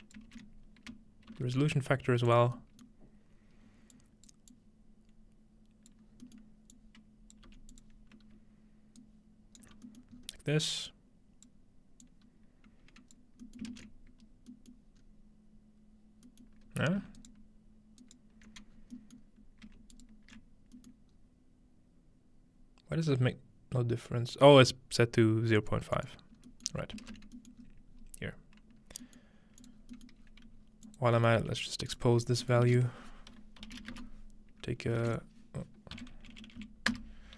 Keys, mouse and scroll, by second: 0.3 shift+s, 1.3 typing, 2.3 click, 2.5-2.9 scroll down 2, 3.9 click, 4.5-5.9 drag, 6.1 scroll down 2, 6.8 click, 7.3 scroll down 1, 7.5 g, 9.0-9.7 alt+right drag, 10.2-10.9 scroll up 1, 10.3-11.5 alt+middle drag, 10.9-14.4 drag, 10.9-11.5 scroll up 1, 13.6 ctrl+middle click, 14.9-16.3 middle drag, 15.0-16.3 scroll up 2, 16.5 middle click, 17.2 ctrl+alt+right click, 18.0 ctrl+alt+right click, 18.7 scroll down 1, 18.9 middle click, 19.9 alt+shift+click, 21.1-21.9 scroll up 2, 25.6-27.3 drag, 26.7-27.6 scroll down 2, 27.1 ctrl+space, 27.6-28.0 scroll up 2, 28.9 scroll down 1, 29.6-32.0 drag, 29.9-30.9 scroll down 1, 31.4 g, 32.2-33.7 scroll up 1, 32.7-35.1 typing, 33.7 click, 35.1 shift+click, 36.0 Down.